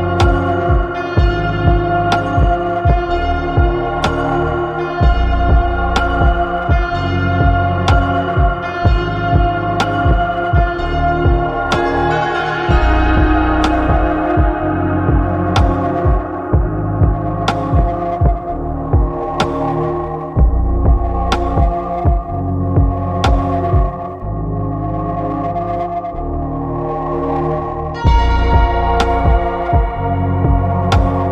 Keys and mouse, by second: 1.5 click, 2.8-4.2 drag, 5.9 click, 10.2-11.2 drag, 11.3-12.4 middle drag, 13.3 shift+middle click, 13.9 middle click, 14.7 shift+middle click, 16.8 shift+middle click, 17.6-19.6 middle drag, 20.8 click, 23.6 middle click, 24.1 middle click, 24.5 middle click, 28.7-30.3 drag.